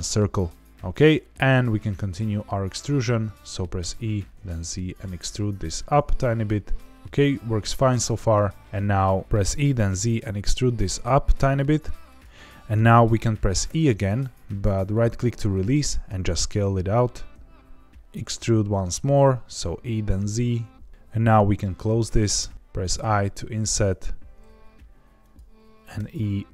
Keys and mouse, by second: 0.6 middle click, 2.4 shift+middle click, 3.7 e, 4.3 z, 7.0-8.3 middle drag, 9.2 ctrl+z, 9.4 e, 9.8 z, 12.0 click, 13.6 e, 15.5 right click, 16.0 s, 18.0 e, 18.0 z, 22.3 f, 22.9 i, 25.1 click, 25.9 e.